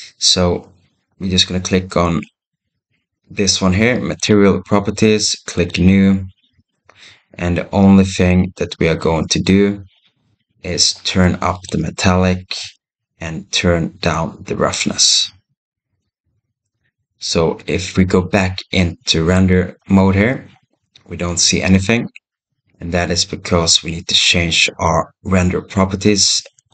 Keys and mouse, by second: 11.5-12.8 drag, 16.0-17.1 drag, 19.2 click, 26.6 click.